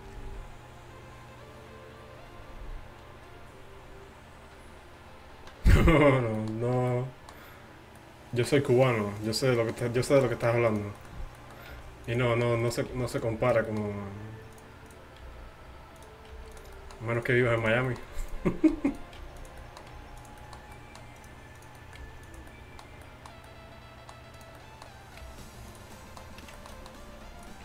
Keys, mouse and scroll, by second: 6.5 middle click, 11.7 g, 13.0 g, 15.3 g, 16.4 g, 17.5 g, 19.2 g, 20.0 g, 21.2-22.6 middle drag, 22.0 g, 22.7 middle click, 23.1 middle click, 23.3 click, 24.4-26.1 drag, 25.3 g, 27.4 click.